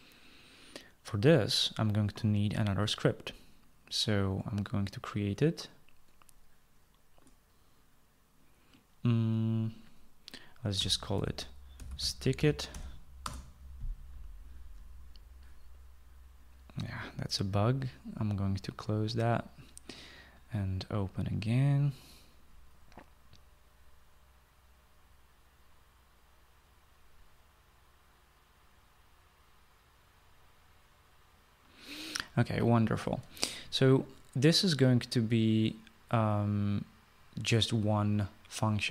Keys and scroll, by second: 11.5-14.0 typing.